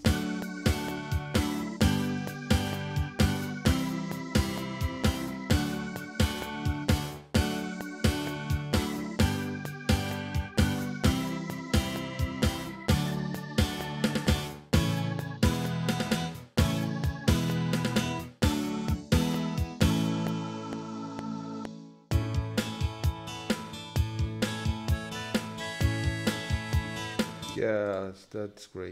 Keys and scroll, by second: 24.2 ctrl+s, 27.5 space.